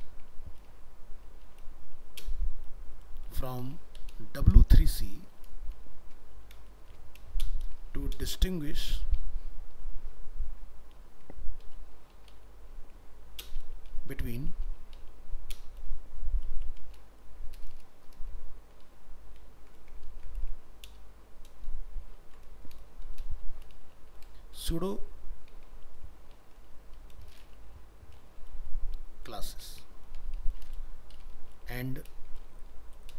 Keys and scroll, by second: 19.0 ctrl+z.